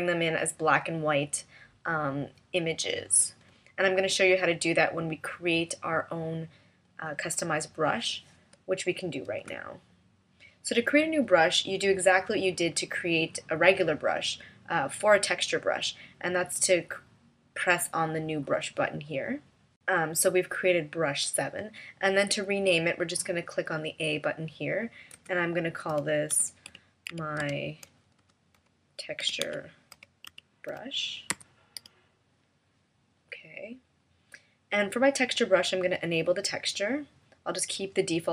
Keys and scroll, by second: 7.4 v, 9.4 BackSpace.